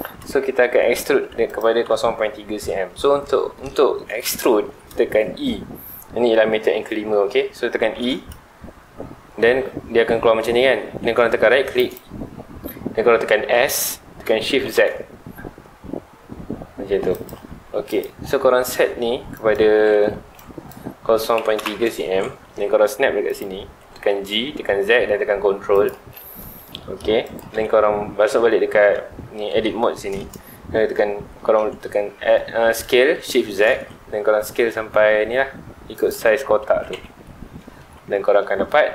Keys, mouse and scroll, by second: 0.0 Tab, 1.0 3, 1.4 alt+click, 3.2 middle click, 4.1 scroll down 2, 4.3 shift+middle click, 4.8-7.8 scroll up 2, 11.9 right click, 13.5 s, 17.2 click, 17.5 Tab, 17.8 click, 19.3 click, 20.2 Escape, 20.3-21.6 drag, 21.6 KP_Enter, 22.6 g, 23.4 ctrl+click, 23.7 scroll up 1, 23.8 middle click, 24.2 g, 25.8 ctrl+click, 26.1-27.2 middle drag, 27.2 click, 27.5 Tab, 29.3 3, 29.8 scroll down 1, 29.9 middle click, 30.5-31.3 scroll up 1, 31.3 middle click, 31.7-32.2 scroll up 2, 32.2 s, 36.1 shift+click, 36.6 alt+a, 36.9 Tab, 37.0-37.6 scroll down 4, 37.2 middle drag, 37.6 alt+a, 37.9-38.9 middle drag.